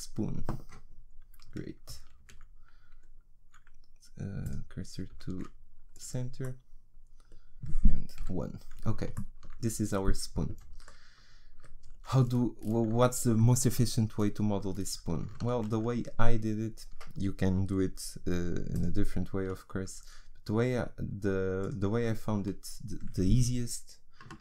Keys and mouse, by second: 2.2 shift+s, 5.3 shift+s, 6.4-8.2 middle drag, 8.2 KP_1, 15.6 shift+a.